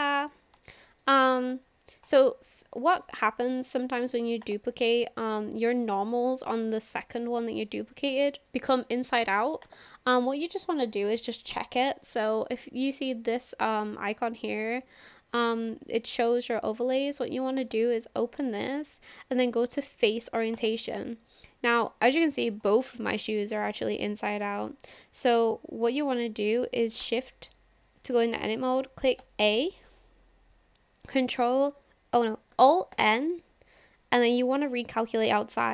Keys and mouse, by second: 0.6 shift+middle click, 1.6 shift+middle click, 4.6-5.8 drag, 9.8 click, 17.6-21.4 drag, 22.9-23.8 shift+middle drag, 25.0 click, 27.0 Tab, 29.2 a, 32.9 alt+n.